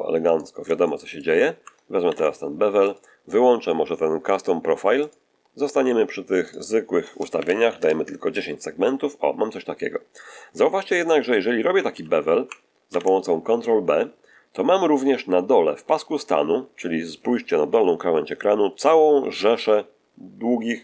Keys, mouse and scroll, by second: 0.2 right click, 0.7 shift+middle click, 2.0 ctrl+shift+b, 2.8 ctrl+shift+click, 4.9 click, 6.4 click, 7.3 1, 7.3 0, 7.7 Return, 11.8 ctrl+z.